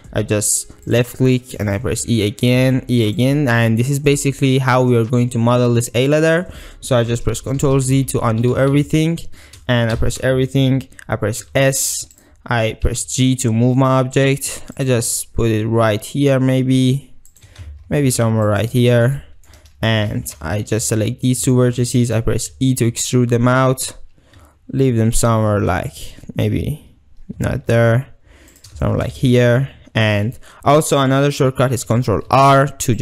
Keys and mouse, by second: 0.9 click, 1.6 e, 2.5 click, 2.7 e, 7.5 ctrl+z, 7.6 ctrl+z, 7.8 ctrl+z, 8.0 ctrl+z, 8.2 ctrl+z, 8.6 ctrl+z, 8.8 ctrl+z, 9.0 ctrl+z, 10.0 a, 11.4 s, 12.9 g, 14.8 click, 15.0 r, 17.4 g, 18.5 shift+click, 19.2 ctrl+click, 20.4 1, 20.8 click, 21.6 shift+drag, 22.0 ctrl+click, 22.5 e, 28.6 shift+click, 28.8 shift+middle drag, 29.3 ctrl+middle drag, 32.3 ctrl+r.